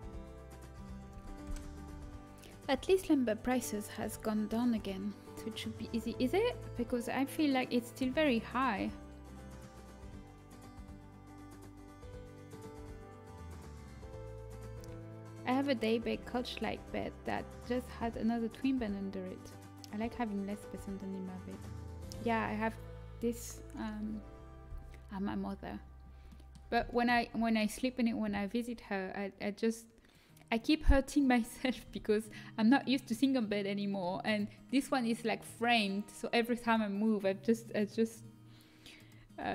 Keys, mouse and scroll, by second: 1.8 a, 25.6-27.0 middle drag, 30.0 click, 30.8 middle click, 31.8 a.